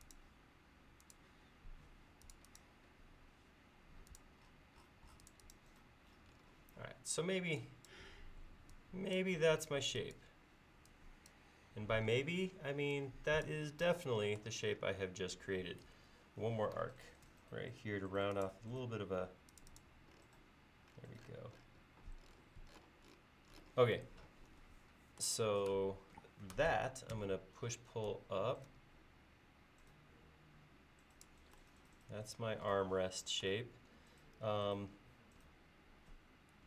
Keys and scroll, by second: 7.2 e, 17.3 a, 27.2 p.